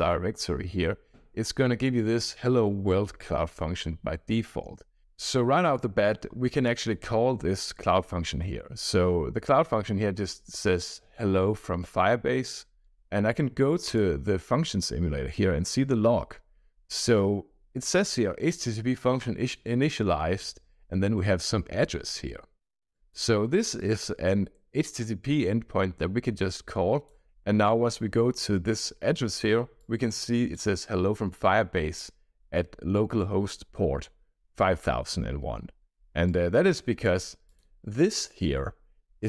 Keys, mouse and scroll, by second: 6.4-6.9 scroll down 2, 12.8 scroll down 1, 13.8 click, 22.8 click, 23.7-27.1 drag, 29.8-30.5 drag, 36.2 click, 37.4 click.